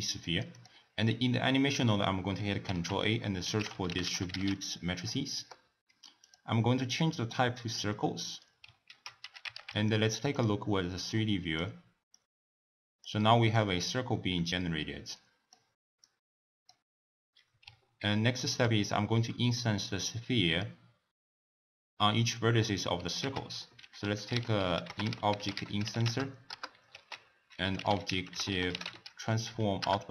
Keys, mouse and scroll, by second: 0.5 click, 2.6 ctrl+a, 6.8-8.8 drag, 8.8 ctrl+a, 11.0 click, 12.1-13.5 drag, 13.5-13.9 middle drag, 13.9-14.3 scroll down 1, 14.3-15.2 scroll up 2, 15.2 click, 23.2 ctrl+a, 26.9 ctrl+a.